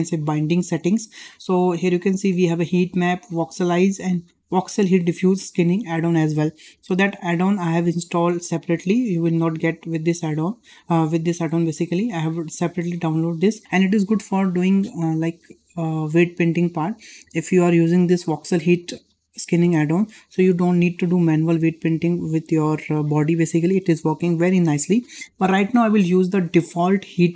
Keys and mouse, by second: 1.5-6.5 drag, 7.3-27.3 drag.